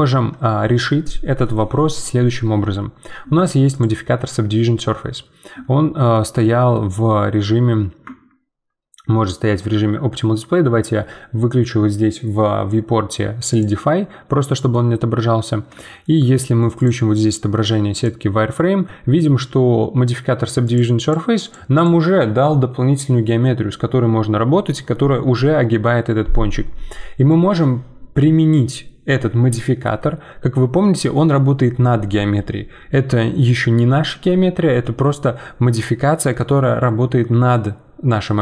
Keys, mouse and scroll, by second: 3.7-6.1 drag, 6.1-8.0 middle drag, 8.0 Tab, 13.5 click, 14.7-16.7 middle drag, 16.7-24.8 drag.